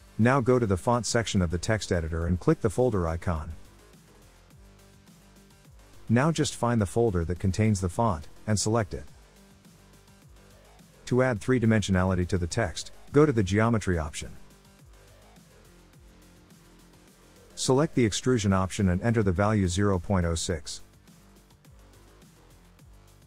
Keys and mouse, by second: 4.0 click, 5.4 click, 11.0-13.0 drag, 13.3 click, 13.7 click, 15.5-17.0 drag, 18.0 click, 20.3-23.0 drag.